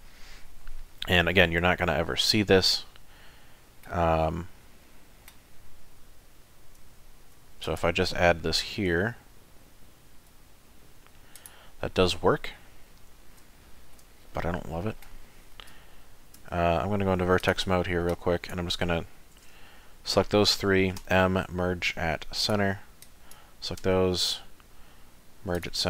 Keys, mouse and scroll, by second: 2.8 middle click, 4.1 shift+middle click, 7.2 ctrl+r, 11.8 middle click, 12.9 middle click, 13.6 shift+middle click, 14.1 middle click, 15.7 2, 16.4 3, 16.8 1, 17.4 click, 18.1 click, 21.0 m, 23.0 click, 23.8 m.